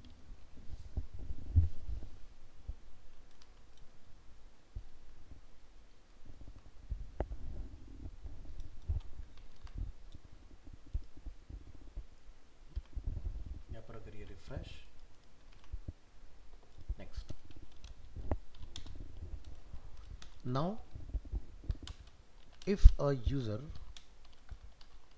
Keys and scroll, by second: 5.9 ctrl+s, 9.5 ctrl+s, 12.8 alt+Tab.